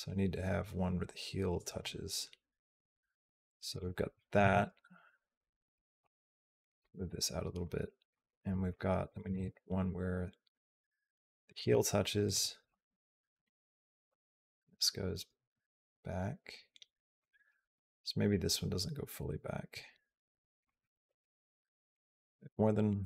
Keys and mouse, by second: 4.2 a, 4.9 click, 5.8 g, 6.6 click, 7.5 click, 8.1 click, 8.5 click, 9.1 g, 12.1 click, 12.5 g, 13.7 g, 17.5 click, 18.1-20.5 drag, 21.7 click.